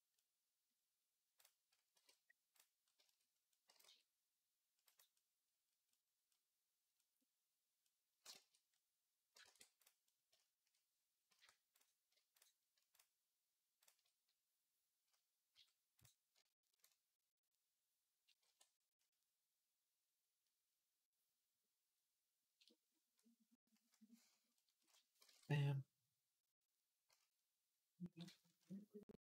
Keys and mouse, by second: 1.8 h, 3.5 g, 8.1 shift+click, 9.1 ctrl+click, 9.2 ctrl+a, 10.1 shift+click, 11.1 q, 11.9 shift+click, 15.3 q, 19.1 ctrl+j, 25.1 ctrl+Tab.